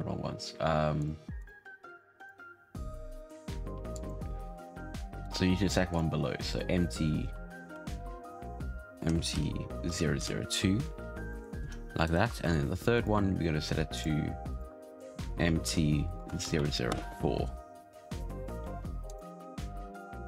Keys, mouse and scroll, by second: 1.3 click, 1.8 click, 2.1-5.1 drag, 5.2 right click, 5.8-9.0 drag, 10.9-11.3 scroll down 1, 11.3-11.6 shift+middle drag, 11.6-12.0 scroll up 1, 12.0 right click, 12.4 shift+middle click, 12.9-16.2 drag, 16.2 Down, 16.4 Down, 17.4-19.0 scroll down 3, 19.0 click.